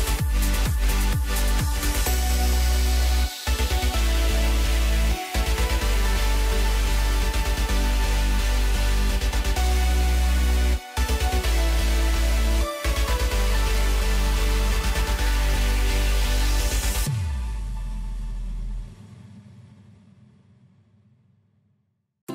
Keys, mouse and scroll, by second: 1.3-2.8 middle drag, 2.8 KP_1, 3.4-4.0 scroll up 2, 4.0 2, 4.7 click, 4.9 click, 5.5-7.7 right drag, 7.7 click, 7.8 click, 8.7 ctrl+b, 13.5-15.5 drag, 15.5-16.2 scroll down 1, 16.2-17.1 middle drag, 17.1-18.8 scroll up 1, 18.8 3, 19.2 click, 20.5 ctrl+KP_Add, 20.9 ctrl+KP_Add, 21.3 ctrl+KP_Add, 21.6-22.0 ctrl+KP_Add.